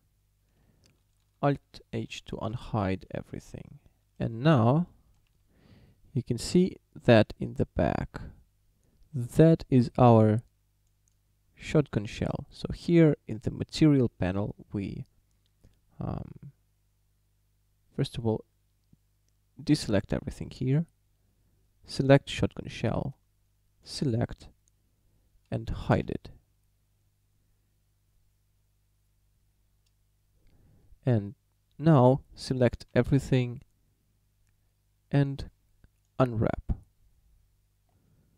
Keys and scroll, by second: 2.0 alt+h, 4.5 a, 5.3 a, 19.8 a, 26.0 h, 32.9 a.